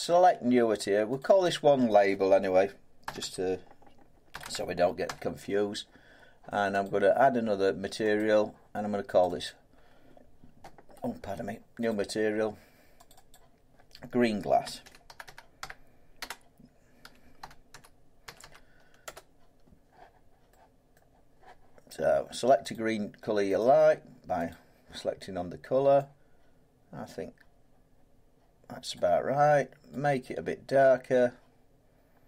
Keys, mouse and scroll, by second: 1.2 click, 1.4 click, 3.0-5.0 typing, 6.8 click, 8.2 click, 9.2 click, 9.4 click, 11.9 click, 13.1 click, 13.3 click, 14.6-15.6 typing, 17.0-19.0 typing, 20.9 middle click, 22.7 click, 23.6 click, 24.5 click, 28.9 click.